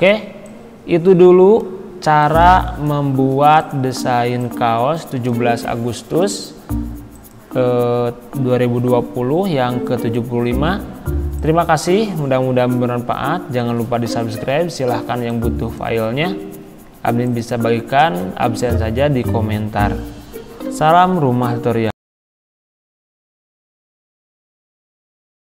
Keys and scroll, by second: 4.1 z.